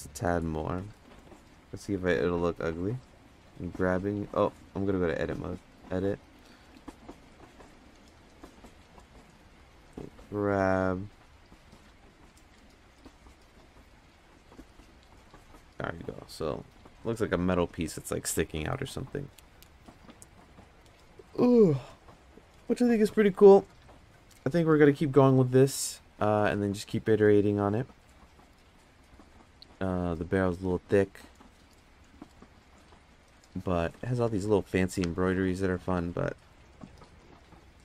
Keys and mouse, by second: 1.7 g, 2.2 z, 3.6 g, 4.9-5.7 drag, 6.3 g, 12.7 Tab, 13.3 Tab, 14.2-15.0 drag.